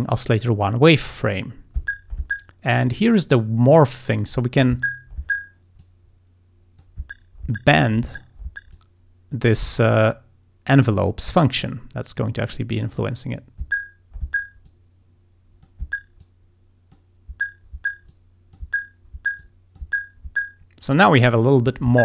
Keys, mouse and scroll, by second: 3.7-4.8 drag, 5.9-7.1 drag, 8.8-9.9 drag, 11.1 click, 12.1-13.3 drag, 14.7-15.9 drag, 16.3 click, 18.2 click, 19.5 click.